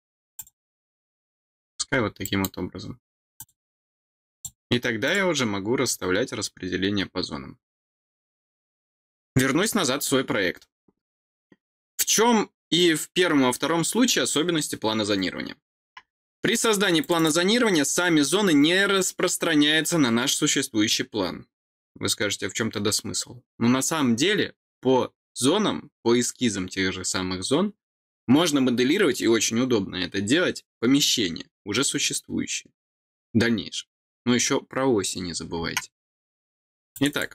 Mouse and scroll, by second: 0.3 click, 1.6-1.9 scroll down 2, 2.1 middle click, 3.3 click, 4.2 click, 4.9 click, 16.9 click, 17.1 click, 36.8 click, 37.0 click.